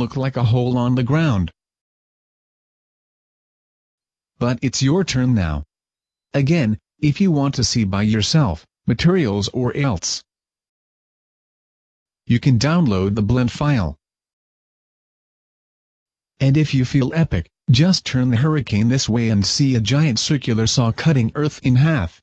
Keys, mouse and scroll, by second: 3.9 right click, 4.5 right click, 5.1 right click, 5.5 right click, 8.1 click, 9.4 click, 10.1-10.5 scroll up 4, 10.5 right click, 11.3 right click, 11.7 right click, 15.2 middle click, 16.7 right click, 17.8 g, 18.5 right click, 19.5 r, 20.5 click.